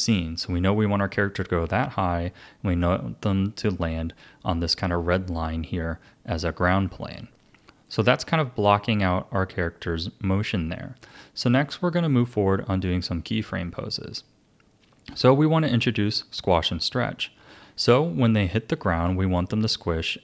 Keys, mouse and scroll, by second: 7.0-11.1 drag, 17.5-17.9 scroll up 2, 18.3-20.2 shift+middle drag.